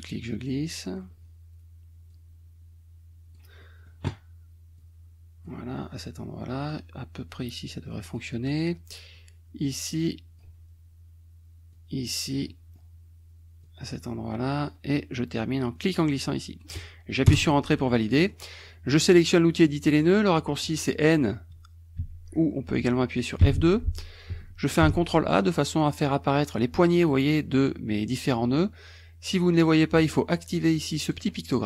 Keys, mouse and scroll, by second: 2.1-3.6 drag, 3.6 middle click, 4.8 click, 6.7-8.4 drag, 9.1-10.6 drag, 11.7-13.0 drag, 12.5 right click, 13.6-14.9 drag, 15.8 click, 17.3 Return, 18.0 middle click, 22.0 n, 23.4 F2, 24.9 ctrl+a, 30.0 click, 31.1 click.